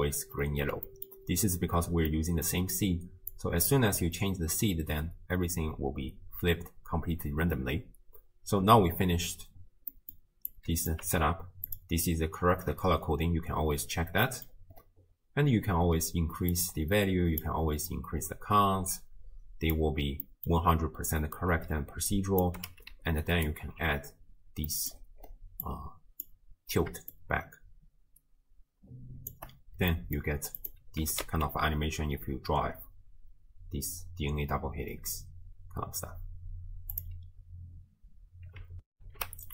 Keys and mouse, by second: 0.9 click, 2.1 click, 3.3 click, 9.9 middle click, 10.5 click, 11.1 g, 14.3 middle click, 16.5 click, 17.9-19.8 drag, 20.3 middle click, 22.2 click, 23.4 ctrl+alt+drag, 24.7 middle click, 25.8 click, 27.2-29.3 shift+drag, 30.0 middle click, 31.0 g, 38.9 ctrl+alt+shift+w, 39.2 ctrl+alt+shift+q.